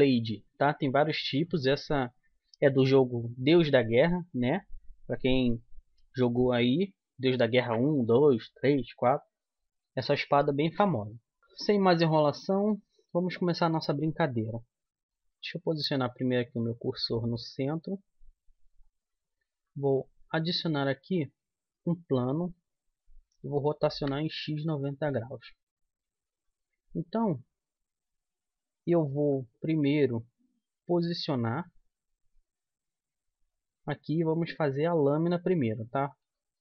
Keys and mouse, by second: 15.2 shift+s, 19.6 shift+a, 23.3 r, 26.2 z, 27.0 click, 28.0-29.7 middle drag, 29.1 s, 31.5-33.4 drag, 35.0-36.6 middle drag, 36.3 Tab.